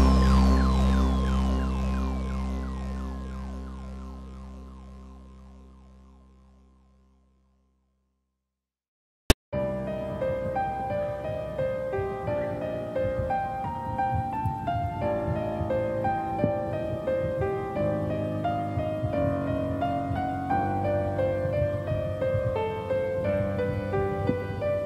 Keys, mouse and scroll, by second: 1.3 click, 3.1 click, 3.9 KP_0, 5.5 scroll down 1, 5.8 middle click, 6.4 scroll up 1, 7.2 click, 9.0 click, 9.3-11.1 scroll down 9, 11.1-12.3 scroll up 2, 12.6 click, 21.0 click, 22.8 KP_0, 24.5 middle click.